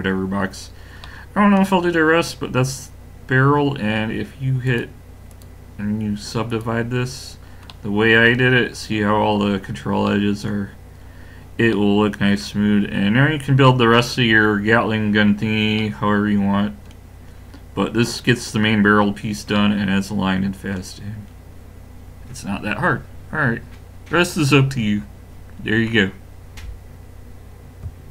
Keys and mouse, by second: 4.7-7.2 drag, 7.3-19.0 middle drag, 21.6-24.8 middle drag.